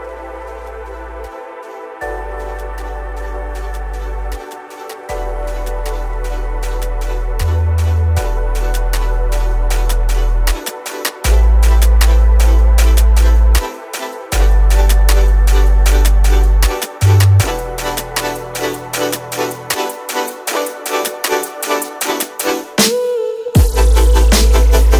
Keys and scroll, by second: 17.4 shift+F8, 22.6 KP_Decimal.